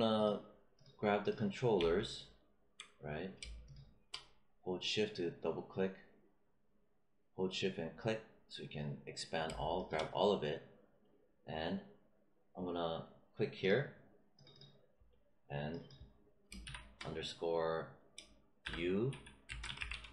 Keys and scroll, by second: 16.6 shift+-, 18.5-20.1 typing.